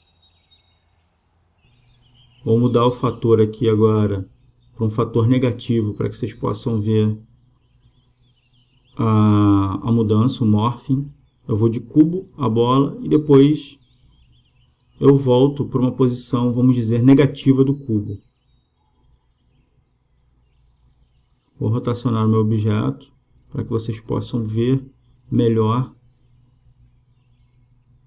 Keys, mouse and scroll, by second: 7.2-9.1 drag, 13.4-15.1 drag, 24.9-26.8 drag, 27.1-28.0 drag.